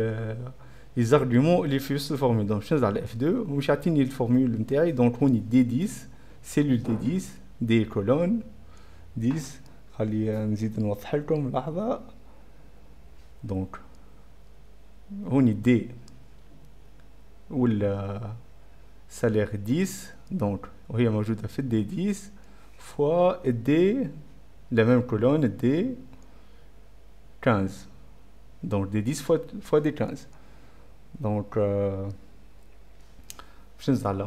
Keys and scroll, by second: 1.9 F5, 1.9 F4, 2.1 F2, 2.6 F2, 33.8 Scroll_Lock, 33.9 End, 34.1 Return.